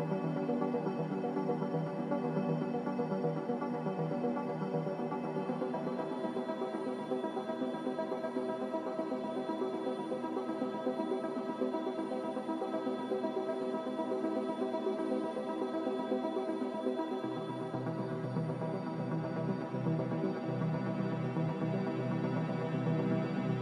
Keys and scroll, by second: 16.8 Delete, 22.2 Delete.